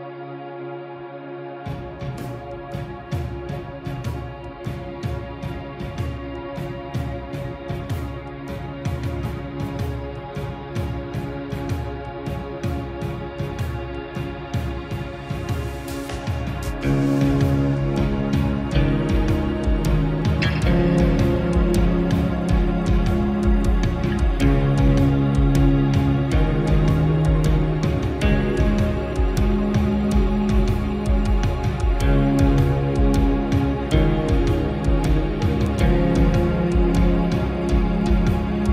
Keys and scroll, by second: 6.9 ctrl+-, 8.6 ctrl+0.